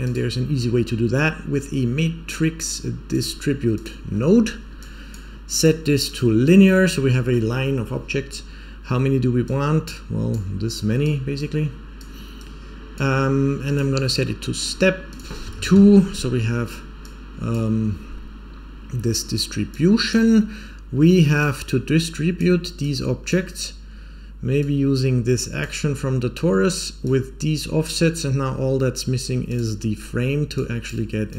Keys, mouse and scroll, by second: 4.1-4.7 scroll down 4, 4.7 click, 5.5-6.1 drag, 6.4-7.1 scroll up 3, 6.7 middle click, 9.4-10.2 drag, 10.7 click, 11.3 click, 12.3 click, 13.6-14.6 drag, 15.0 click, 16.2-16.9 scroll down 1, 16.9-17.4 drag, 16.9 scroll down 2, 17.9 scroll up 2, 19.7-20.1 drag, 21.3-22.3 drag, 22.7-23.3 drag, 24.5-25.5 drag, 26.9-27.8 drag, 29.4 click, 29.9-30.5 scroll down 1, 30.5 click, 30.5 scroll down 2, 31.2 click.